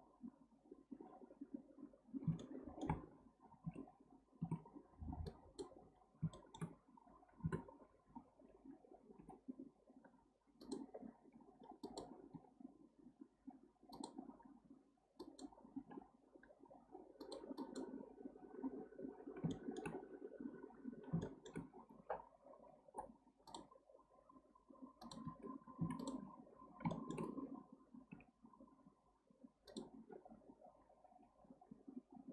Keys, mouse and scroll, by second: 1.9-2.4 scroll down 3, 2.4-3.1 shift+middle drag, 3.1-3.7 scroll up 1, 3.7 Tab, 4.5 Tab, 5.2 click, 5.9-6.3 scroll up 1, 6.3-7.4 shift+middle drag, 7.4 KP_7, 8.0-9.2 scroll up 1, 9.2 g, 10.9-11.8 scroll down 2, 11.8 click, 12.3 g, 15.2 click, 15.8 g, 17.6 click, 18.7-19.5 scroll down 4, 19.5-20.9 shift+middle drag, 20.9-21.2 scroll up 1, 21.2-22.8 shift+middle drag, 22.8 k, 25.8 1, 26.0 click, 26.5-26.9 scroll up 1, 26.9-28.1 shift+middle drag, 28.1 g, 30.2-31.8 scroll down 3.